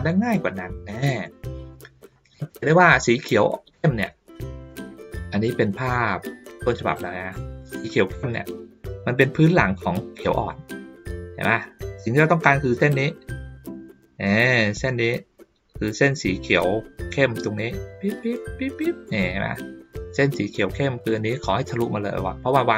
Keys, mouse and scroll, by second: 0.0-2.1 middle drag, 3.5 ctrl+scroll down 1, 4.3 middle click, 5.0-5.3 ctrl+scroll down 1, 6.2 ctrl+scroll up 1, 6.3 ctrl+middle click, 7.1 ctrl+middle click.